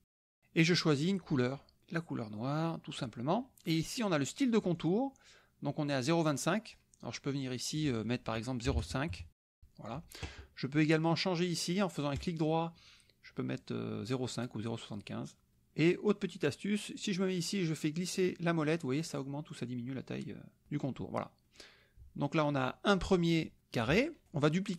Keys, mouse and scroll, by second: 0.6 click, 1.5 click, 2.0-3.2 drag, 4.7 click, 7.8 click, 8.7 KP_0, 9.1 KP_5, 9.5 KP_Enter, 12.2 click, 15.5 click, 17.6-18.4 scroll up 2, 18.6 scroll up 1, 19.0-19.6 scroll down 1, 21.5 click, 22.5 click.